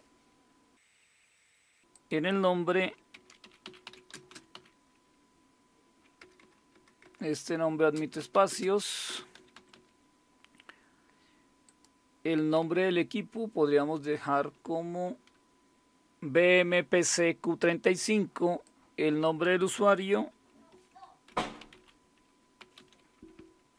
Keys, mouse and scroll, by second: 1.9 click, 2.5 click, 2.9-5.0 typing, 6.2-10.3 typing, 11.7 click, 12.3 click, 12.6-15.1 typing, 15.7 Right, 15.7 Delete, 18.6 click, 20.7 Caps_Lock, 21.0-23.7 typing.